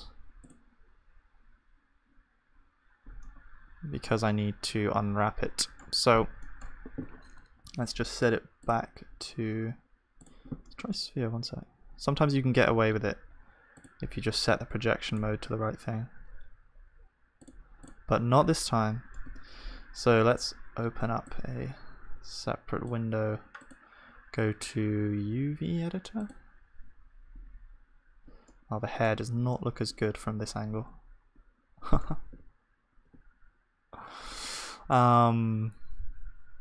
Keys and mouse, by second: 3.2-10.6 middle drag, 10.7-16.9 middle drag, 18.6 click, 18.6-21.5 middle drag, 19.3 Tab, 19.3 right click, 21.5-28.5 drag, 21.7 right click, 28.5-32.6 middle drag, 29.2 Tab, 32.9 ctrl+s, 35.6-36.6 middle drag.